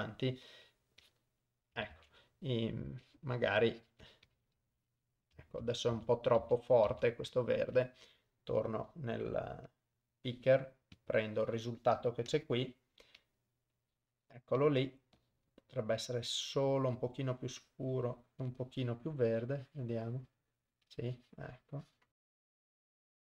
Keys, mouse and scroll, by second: 1.1 click, 2.0 ctrl+z, 3.1 click, 4.1 click, 4.3 click, 4.6 click, 5.7 ctrl+z, 6.0 ctrl+z, 6.5 ctrl+z, 7.0 ctrl+z, 9.8 click, 11.0 click, 12.4 click, 13.3 click, 19.3-20.5 drag, 21.0-22.1 drag, 22.2 click, 22.4 click, 22.5 click, 22.7 click, 22.8 click, 23.0 click.